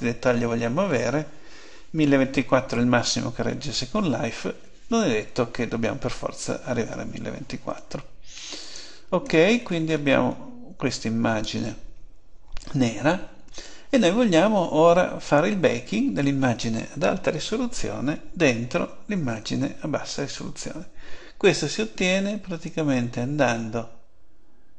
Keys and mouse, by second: 9.5-13.5 middle drag, 22.6-24.3 drag.